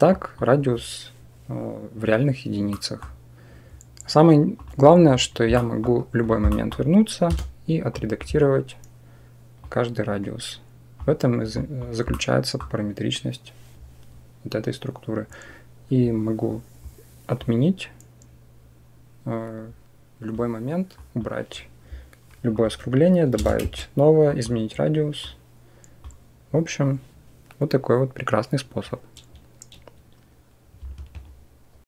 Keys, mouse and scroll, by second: 0.1 click, 2.5 middle click, 4.5 click, 5.4 middle click, 6.3 middle click, 7.1 Tab, 7.9 click, 9.5-10.8 drag, 11.5 click, 11.9 click, 17.3-20.2 drag, 20.8 click, 22.5 click, 24.2-25.9 drag.